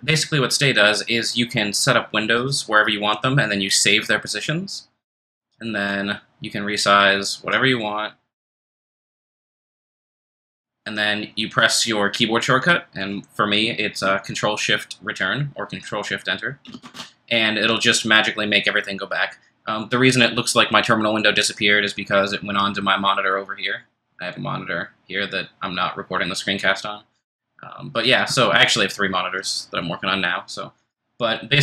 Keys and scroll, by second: 16.8 ctrl+shift+Return.